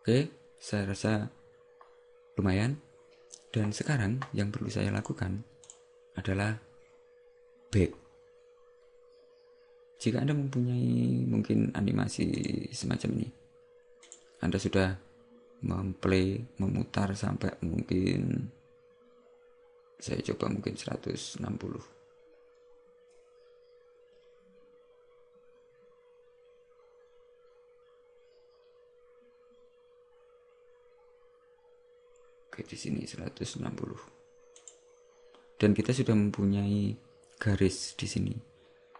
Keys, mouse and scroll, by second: 5.8 click, 12.5 click, 34.8 click.